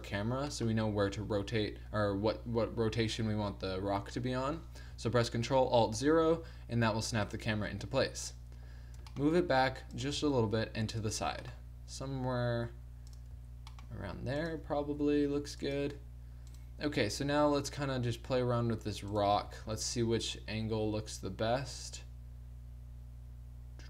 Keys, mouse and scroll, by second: 5.9 ctrl+alt+KP_0, 9.0 g, 10.1 g, 11.3 g, 13.4 g, 14.7 g, 16.5 click, 17.2 r, 19.4 click, 19.6 r.